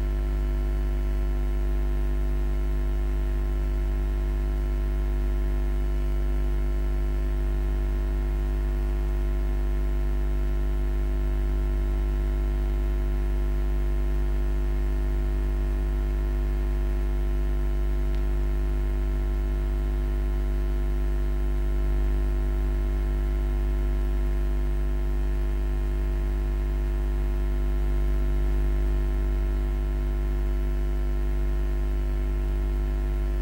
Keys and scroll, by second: 11.5-12.5 typing, 28.4 Escape.